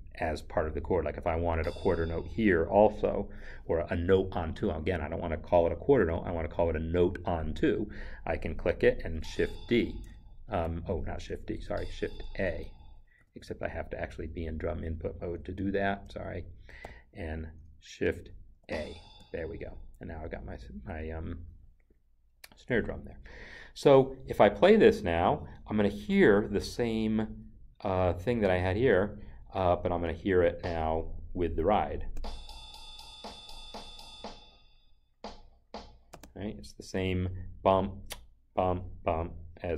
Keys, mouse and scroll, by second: 1.4 click, 9.0 shift+d, 10.4 ctrl+z, 11.6 shift+a, 14.3 Escape, 15.6 ctrl+z, 16.8 n, 18.5 n, 20.8 Escape, 23.2 Escape, 30.4 click, 32.0 click.